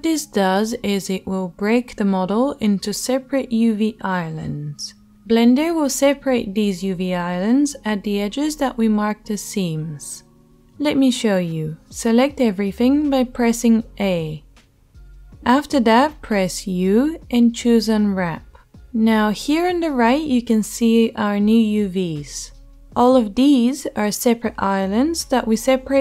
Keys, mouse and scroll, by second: 12.9 a, 17.7 u, 19.0-24.3 shift+middle drag, 24.3 click, 24.5-26.0 middle drag.